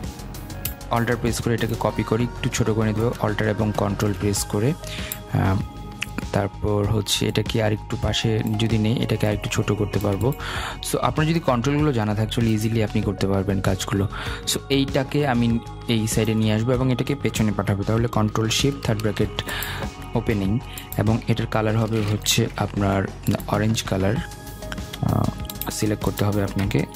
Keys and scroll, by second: 18.6 ctrl+shift+[.